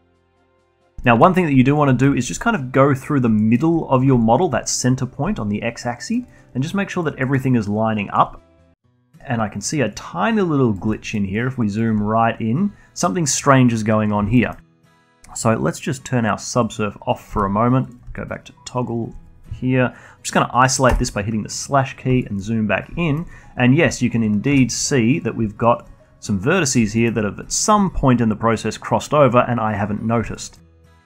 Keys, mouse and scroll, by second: 0.1 alt+drag, 0.4 alt+middle drag, 0.6-1.5 alt+drag, 1.5-2.1 alt+middle drag, 2.1 alt+drag, 2.3 alt+middle drag, 2.6-3.8 alt+drag, 3.8-4.3 alt+middle drag, 4.3-4.7 scroll up 1, 4.7-5.8 alt+drag, 5.8-6.7 alt+middle drag, 6.7-7.7 alt+drag, 7.7 alt+middle click, 7.9-8.9 alt+drag, 8.9-9.4 scroll up 1, 9.4-10.4 alt+middle drag, 10.4-11.4 alt+right drag, 11.4-11.8 alt+middle drag, 11.8-14.4 alt+right drag, 14.4-14.8 scroll down 2, 14.8-15.2 alt+middle drag, 15.2-17.1 alt+drag, 17.6 middle click, 17.8 z, 18.6 alt+click, 21.3 /, 22.3-22.7 scroll up 1, 22.7 alt+middle drag, 22.9-24.4 scroll up 7, 23.5 alt+middle click, 24.4-24.9 alt+drag, 24.9 Tab, 25.6 drag, 25.9-27.0 alt+drag, 27.0-28.0 scroll down 1, 28.0-31.0 alt+middle drag.